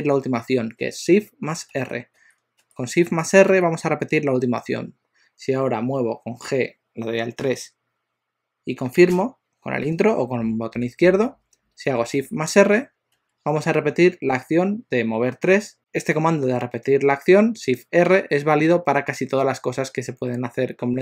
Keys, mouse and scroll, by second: 1.7 shift+r, 2.2 shift+r, 3.2 shift+r, 6.5 g, 12.3 shift+r, 12.7 shift+r.